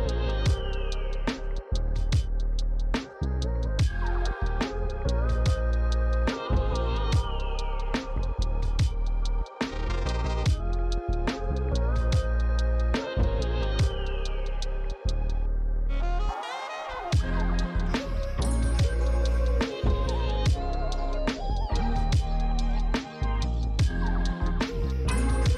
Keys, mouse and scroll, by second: 6.9 click, 8.2-9.9 typing, 12.4 click, 13.6-14.7 typing, 17.4 click.